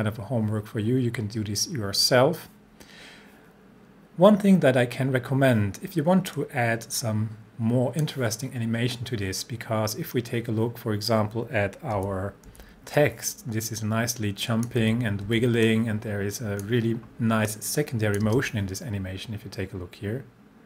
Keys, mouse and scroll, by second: 6.4-8.3 drag, 12.0 c, 12.5 c, 13.0-14.8 drag, 14.8 c, 15.3 c, 15.7-17.0 drag, 18.3 space.